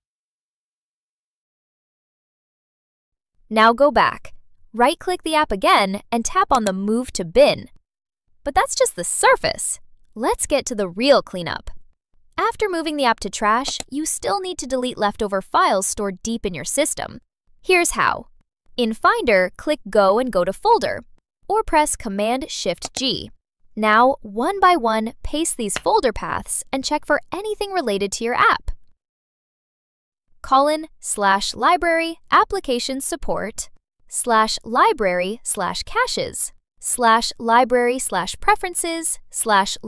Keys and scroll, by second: 0.1 super+BackSpace, 20.1 shift+super+g, 23.3 Return, 25.0 super+a, 26.1 super+BackSpace, 28.1 shift+super+g, 29.0 BackSpace, 29.7 BackSpace, 32.7 Return, 34.6 super+BackSpace, 35.7 shift+super+g, 36.3 BackSpace, 38.0 Return, 39.1 shift+super+g.